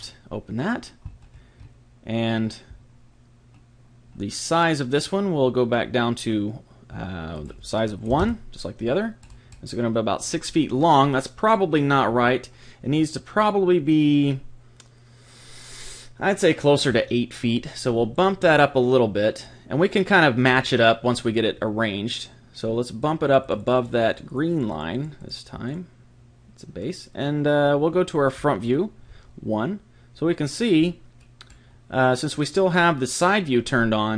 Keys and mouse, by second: 0.0 click, 1.2-7.3 middle drag, 7.3 click, 9.2-16.8 middle drag, 18.1 click, 21.3-23.0 middle drag, 23.0 click, 27.4-31.2 middle drag, 29.1 KP_1.